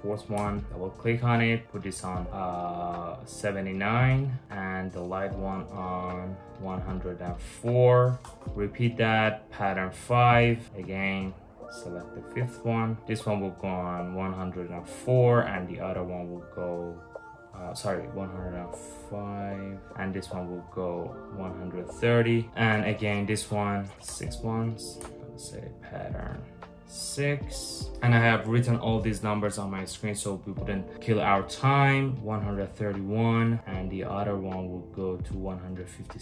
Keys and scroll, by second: 0.0 Return, 0.6 Return, 7.9 Return, 10.6 Return, 10.6 5, 12.9 Return, 13.0 Return, 23.9 Return, 24.6 Return, 26.2 6, 26.6 Return.